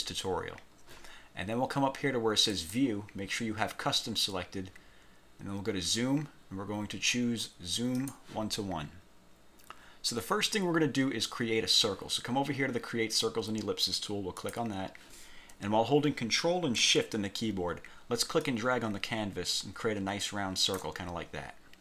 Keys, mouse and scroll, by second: 2.6 click, 8.0 click, 14.6 click, 18.6-21.1 ctrl+shift+drag.